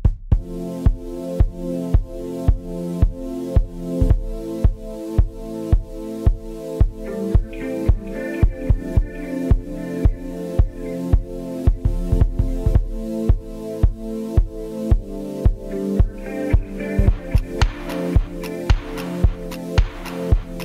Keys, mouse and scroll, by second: 0.0-3.4 typing, 0.2 shift+middle click, 1.1 middle click, 1.3 scroll down 3, 1.6 scroll up 1, 1.8 shift+middle click, 4.6-7.9 drag, 7.9 scroll down 2, 8.1 KP_7, 8.3 shift+middle click, 8.4 scroll up 4, 8.6 shift+middle click, 9.2-12.1 drag, 12.1 shift+d, 12.5 r, 13.0 g, 15.7-18.4 drag, 18.4 right click, 19.0 click, 19.4 right click, 19.9 KP_0, 20.1 scroll down 2, 20.2-20.6 shift+middle drag.